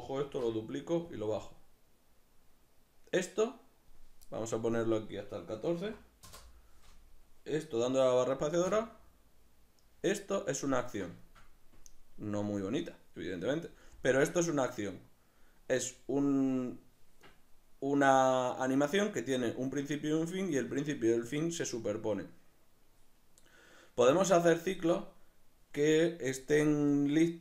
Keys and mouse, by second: 0.2 shift+d, 1.5-10.0 drag, 6.3 Return, 8.6 space, 10.0 middle click, 16.2-19.4 middle drag.